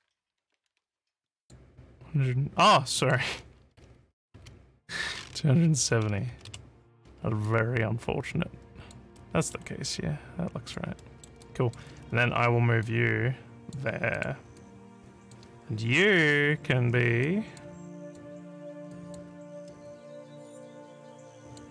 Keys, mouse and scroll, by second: 0.8 click, 3.0 click, 5.8 2, 7.4-8.9 alt+drag, 9.2 alt+middle click, 9.7-10.8 alt+drag, 11.0 alt+middle click, 11.5 alt+click, 11.9 w, 12.8 click, 14.2 click, 14.6 alt+click, 16.2 click, 17.3 alt+click, 18.1 click, 18.9 alt+click, 21.4 click.